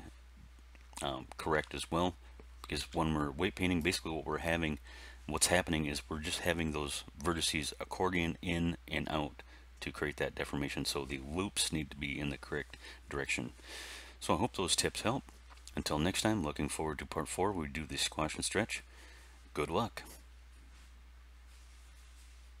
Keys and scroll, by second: 2.7 r.